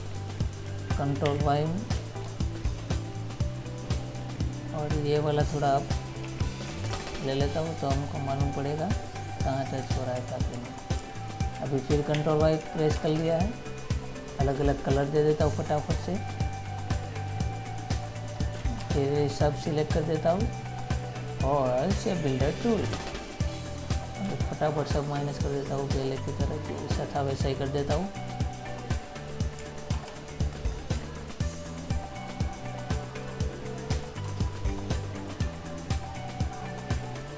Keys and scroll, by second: 0.2 ctrl+z, 1.5 ctrl+y, 2.5 ctrl++, 6.5 Up, 6.9 Right, 10.3 ctrl+-, 12.4 ctrl+y, 19.0 ctrl+-.